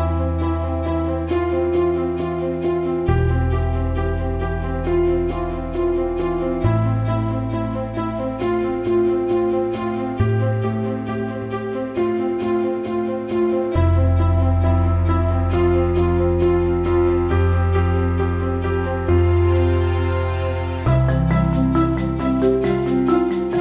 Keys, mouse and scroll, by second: 0.5 alt+shift+middle click, 0.9 ctrl+alt+middle click, 1.4 alt+shift+middle click, 1.8 alt+middle click, 3.6 click, 4.6 ctrl+z, 7.5 ctrl+alt+middle click, 7.6 ctrl+alt+right click, 8.2 ctrl+alt+right click, 8.3 ctrl+alt+middle click, 13.2-13.5 drag, 14.0-14.6 drag, 15.6 click, 15.9 click, 17.4 click, 18.8 click, 20.0 alt+shift+middle click, 20.4 ctrl+alt+middle click, 21.2-22.7 drag.